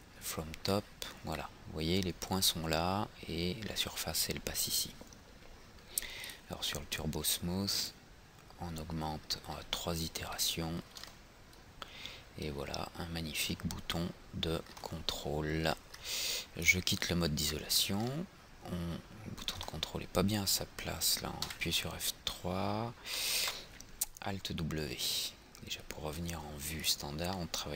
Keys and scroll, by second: 21.6 F3, 23.5 alt+w.